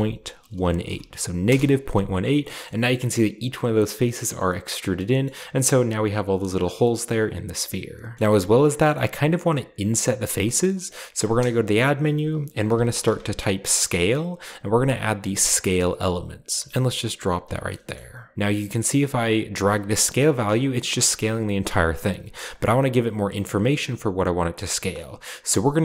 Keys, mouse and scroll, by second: 0.0-0.8 typing, 1.4 Return, 2.6 middle click, 2.7-3.3 scroll up 2, 2.9 typing, 4.7 scroll down 1, 4.9-5.7 middle drag, 5.3-6.6 scroll up 2, 6.6-7.2 scroll down 1, 8.5-9.7 scroll up 1, 10.6-11.1 middle drag, 11.2 shift+a, 12.6-13.0 typing, 15.5-18.1 drag, 17.6 middle click, 18.6 ctrl+b, 20.4 shift+click, 20.4 shift+right click, 20.6-21.6 shift+scroll down 1, 21.1 shift+middle click, 22.1 shift+click, 24.0 shift+click, 24.5 shift+middle click.